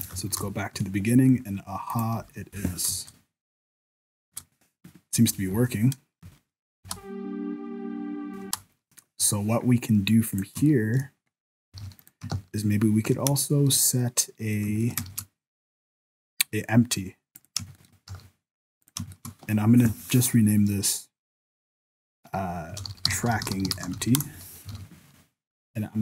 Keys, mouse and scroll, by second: 0.4 shift+Left, 1.3-1.9 scroll down 2, 1.9 right click, 2.2 n, 2.5 n, 2.9 KP_0, 4.3-8.4 typing, 10.1 click, 10.7 shift+middle click, 11.0 scroll down 4, 11.3-11.7 scroll up 2, 11.8 alt+a, 12.0 right click, 12.3 shift+s, 13.4 shift+middle click, 14.0 middle click, 14.7 shift+scroll up 1, 14.9 shift+middle click, 15.0 shift+a, 17.7 shift+middle click, 18.1 s, 19.1 shift+middle click, 19.5 F2, 24.7 alt+a, 25.5 right click.